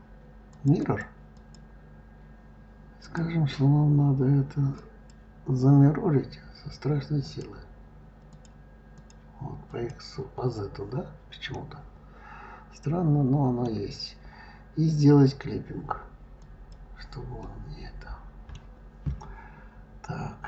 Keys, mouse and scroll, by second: 0.6 click, 1.2 click, 2.8-4.9 drag, 7.0 click, 8.1 click, 8.8 click, 9.5 click, 11.3-14.3 middle drag, 16.2 click, 17.2-20.2 middle drag.